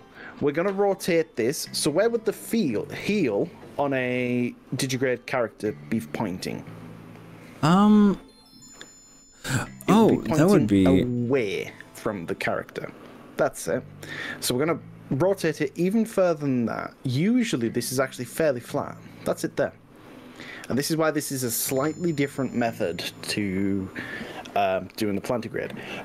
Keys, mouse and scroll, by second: 11.4 r, 20.1 click, 20.7 click.